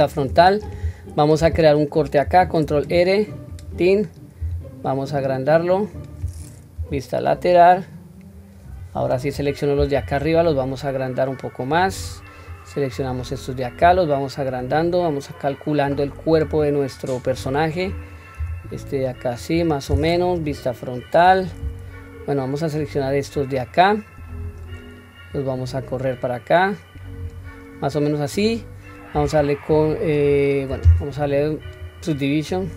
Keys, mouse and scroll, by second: 0.2 scroll up 1, 2.2 ctrl+r, 2.2-2.8 scroll up 1, 4.4 s, 6.7 KP_3, 8.8 click, 10.1 s, 12.5 click, 13.8 s, 17.4 click, 18.3 s, 20.3 KP_1, 23.3-24.4 drag, 25.3-27.2 drag, 31.6-32.7 drag.